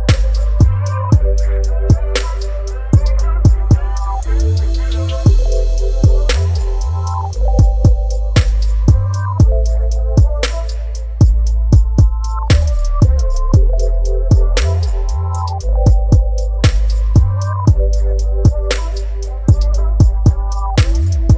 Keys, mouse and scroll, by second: 1.9-6.0 drag, 11.9 click, 11.9-19.6 drag, 19.6 alt+scroll up 1, 20.8 space, 21.0 click.